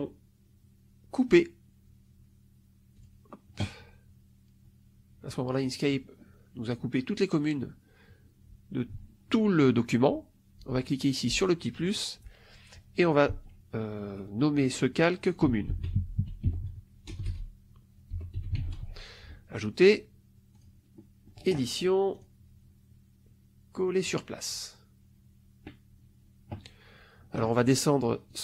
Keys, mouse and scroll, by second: 2.9 click, 11.3 click, 15.2-18.9 typing, 20.5 click, 22.1 click, 24.0 click, 28.2 click.